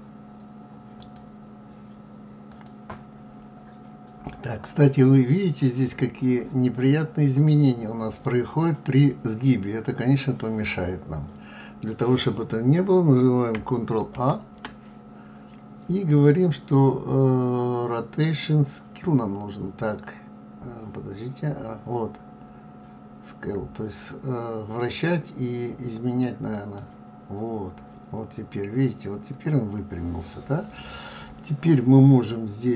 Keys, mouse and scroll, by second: 3.1 scroll up 1, 4.2-4.8 scroll down 1, 4.8-5.8 scroll up 2, 9.3-11.2 scroll down 1, 14.6 ctrl+a, 28.7-31.6 scroll down 1.